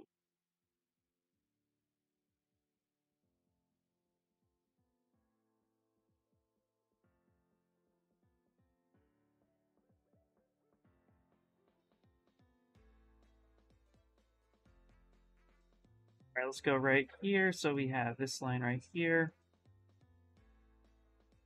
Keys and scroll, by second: 4.4 shift+s, 12.3 shift+s, 14.0-15.8 typing.